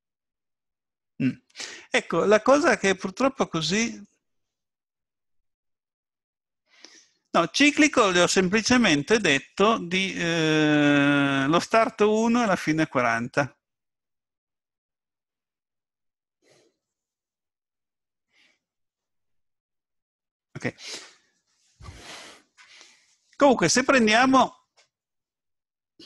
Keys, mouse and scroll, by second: 2.5 middle click, 9.2 click, 18.9 middle click.